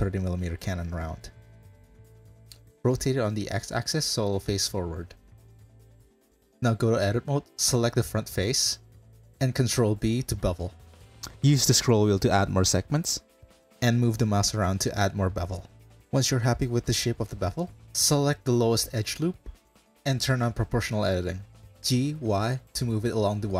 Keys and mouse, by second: 0.5 m, 2.2 drag, 2.6 KP_Decimal, 3.1 drag, 3.5 r, 6.2 right click, 6.6 click, 7.0 shift+click, 7.3 Tab, 8.0 2, 9.9 ctrl+b, 17.4 2, 19.4-20.5 drag, 21.6 g.